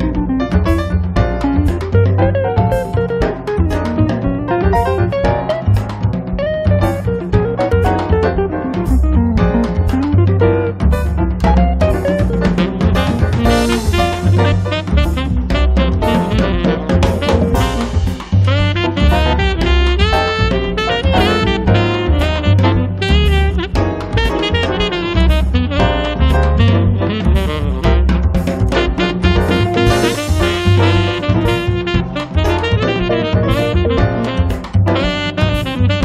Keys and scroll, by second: 0.0-0.9 typing, 1.9 space, 2.7 Escape, 15.3 F10, 26.4 f, 29.1 ctrl+z, 30.6 1, 31.0 0, 31.2 Return, 32.4-33.9 typing, 35.8 2.